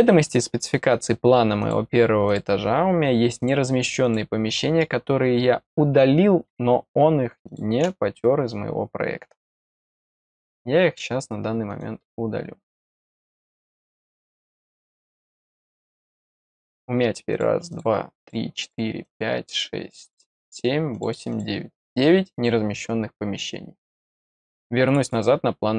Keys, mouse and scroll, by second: 1.5 click, 2.2 click, 3.3 click, 4.0 click, 7.4 click, 11.6 right click, 13.4 click, 14.7 click, 15.9 click, 17.3 click, 17.6 click, 18.1 click, 18.6 click, 19.0 click, 19.4 click, 20.0 click, 20.4 click, 20.9 click, 21.2 click, 24.8 click, 25.0 click.